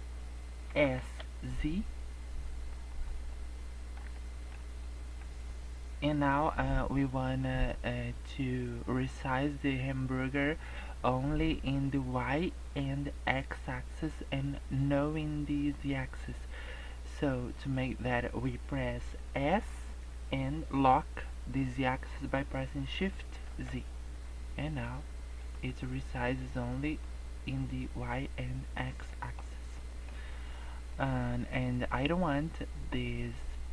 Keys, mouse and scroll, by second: 0.6 s, 3.2 middle click, 4.1 shift+middle click, 4.8 middle click, 5.4 scroll up 1, 19.4 s, 25.7 middle click, 28.7 scroll down 2, 29.0 middle click, 29.4 scroll up 2, 29.6 middle click, 30.8 click.